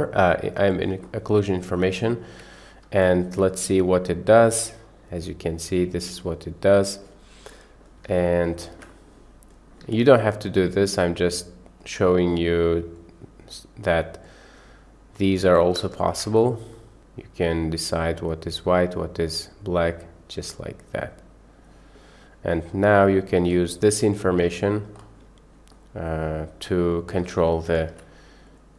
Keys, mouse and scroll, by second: 1.6 click, 2.0-2.3 middle drag, 3.0 ctrl+shift+click, 4.2-7.1 middle drag, 7.6 middle click, 8.5 ctrl+shift+click, 9.0 middle click, 9.6 click, 10.0 shift+a, 13.0-13.9 drag, 14.3 click, 14.5 click, 15.2-15.7 drag, 16.0 ctrl+shift+click, 17.0 click, 19.4-21.8 drag, 22.6 middle click, 23.6-23.9 drag, 24.2 click, 26.0 middle click, 26.7 middle click, 27.9 a, 28.5 click.